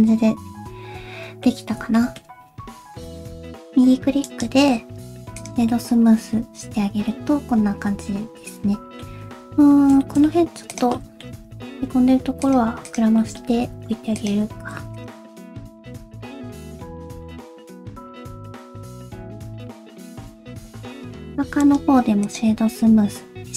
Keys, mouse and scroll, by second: 0.0 middle click, 1.6 scroll down 1, 2.0 shift+middle click, 2.4 scroll down 1, 2.6 Tab, 3.1 middle click, 3.1 click, 3.2 scroll up 2, 3.5 middle click, 4.3 right click, 5.7 middle click, 9.2-9.9 scroll up 3, 9.6 Tab, 10.0 shift+middle click, 10.2 scroll up 1, 10.4 1, 10.7 click, 11.0 middle click, 11.3 scroll up 1, 11.8 alt+s, 11.9 click, 12.9 click, 13.2 middle click, 13.6 alt+s, 13.8-14.2 scroll up 1, 14.6 alt+z, 15.0 click, 15.3 shift+click, 15.4 middle click, 15.4 alt+z, 15.5 alt+s, 15.5 middle click, 15.7 g, 17.1 middle click, 17.6 scroll down 1, 17.7 middle click, 18.2 click, 18.4 middle click, 18.7 alt+s, 18.8 scroll down 1, 19.2 middle click, 19.6 alt+z, 19.6 click, 19.7-20.4 scroll down 6, 19.9 alt+z, 20.0 middle click, 20.2 Tab, 20.4 middle click, 21.6 right click, 22.7 middle click.